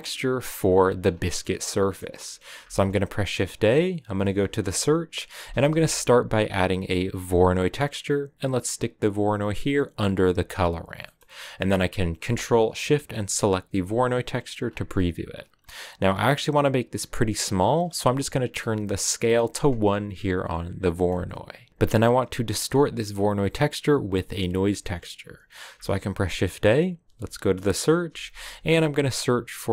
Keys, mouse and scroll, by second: 0.0 click, 0.5-2.5 scroll down 1, 2.5-3.3 scroll down 1, 3.3-3.9 scroll down 1, 3.9-4.8 scroll down 1, 4.8-7.2 scroll down 1, 7.2 scroll down 1, 13.3 ctrl+shift+click, 19.6 click.